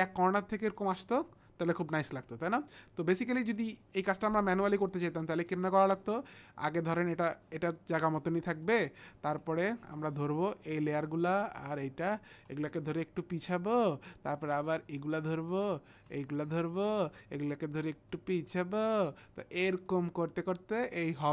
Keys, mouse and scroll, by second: 5.4 click, 10.4 click, 11.6 shift+click, 13.4 click, 15.0 click, 16.1 shift+click, 18.1 click, 19.9 click.